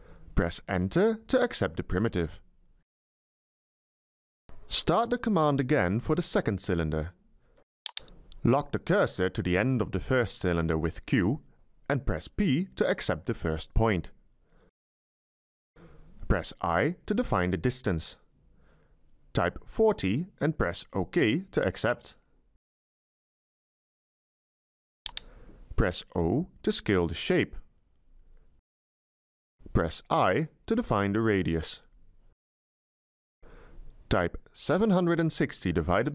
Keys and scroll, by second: 1.2 Return, 11.5 q, 13.7 p, 17.3 i, 19.2 Delete, 21.4 4, 22.0 0, 25.9 0, 30.3 i, 32.1 Delete, 34.3-36.1 typing.